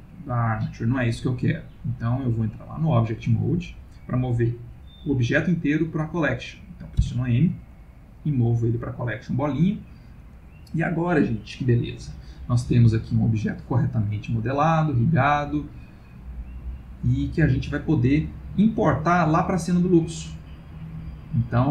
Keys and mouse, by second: 1.8 click, 7.0 m, 16.0 click.